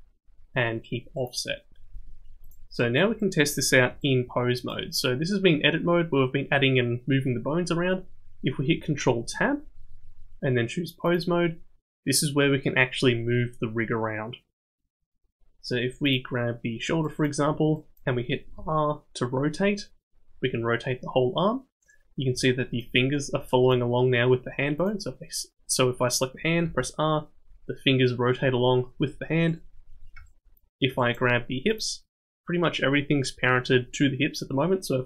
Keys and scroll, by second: 9.2 ctrl+Tab, 18.6 r, 26.6 r.